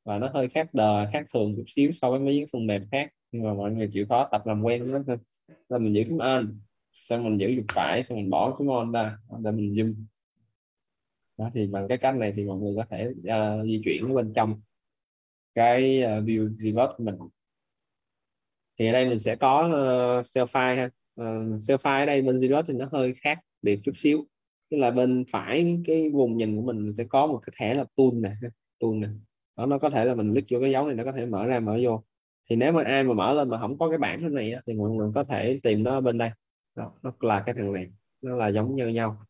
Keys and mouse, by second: 7.5 right click, 11.1 right click, 12.8 right click, 28.6 click, 36.0 click.